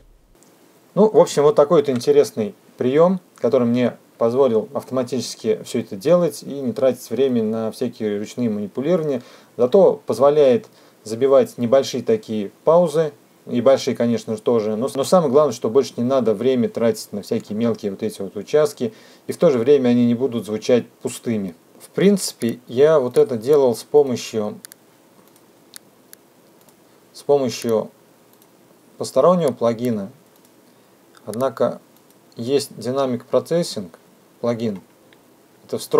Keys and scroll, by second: 0.7 -, 21.7 F2.